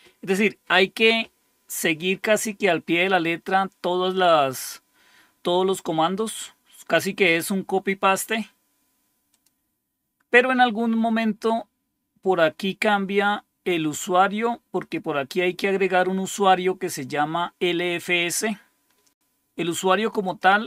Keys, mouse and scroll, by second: 9.2 click, 14.7 click, 18.3-19.7 drag, 20.2 click.